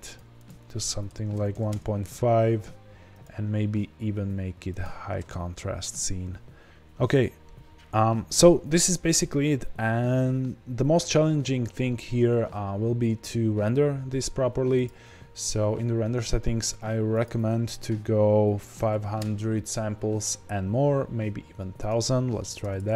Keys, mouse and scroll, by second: 6.6-7.8 scroll down 1.